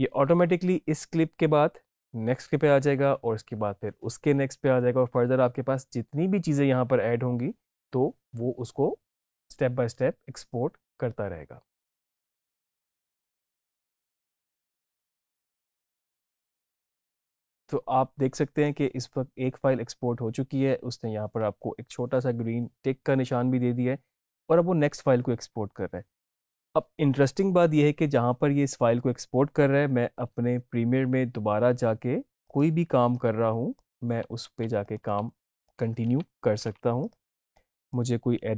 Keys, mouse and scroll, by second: 30.1 alt+Num_Lock, 30.5 alt+Tab, 32.3 click, 34.3 ctrl+c, 34.7 click, 35.6 click, 36.9 click.